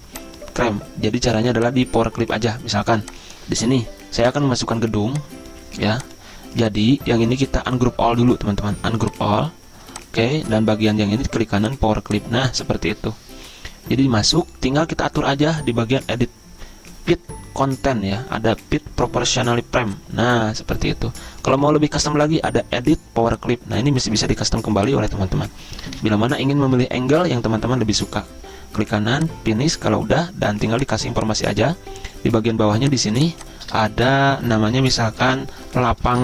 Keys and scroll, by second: 26.1 ctrl+z, 35.5 ctrl+a.